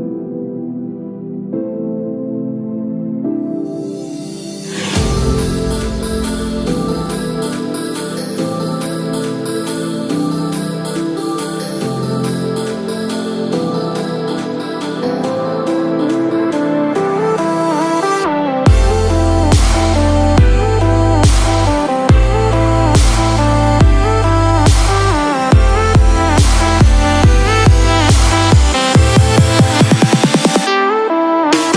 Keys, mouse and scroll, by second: 6.8 ctrl+z, 8.2 click, 18.9-19.4 scroll down 1, 19.4-19.7 scroll up 1, 21.2 space, 23.1 click, 24.5 space, 25.0 click, 30.7 click.